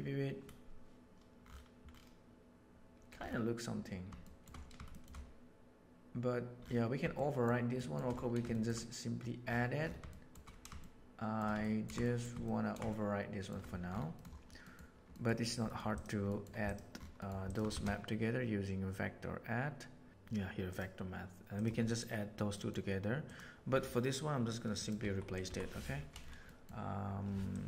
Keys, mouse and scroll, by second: 4.3 shift+middle drag, 4.9 shift+middle drag, 7.2 shift+middle click, 7.7 shift+middle drag, 8.4 shift+middle click, 10.1 shift+middle click, 10.8 shift+middle click, 11.6 ctrl+middle click, 12.0 shift+middle click, 12.4 ctrl+middle click, 12.8-13.5 shift+middle drag, 14.6 middle click, 15.0 middle click, 16.2 middle click, 16.6 click, 17.1 middle click, 17.4 click, 17.6 shift+a, 21.8 middle click, 22.5 middle click, 23.2 click, 24.7 click, 24.9 Delete, 25.2 click, 25.4 Delete, 26.5 middle click, 27.4 click.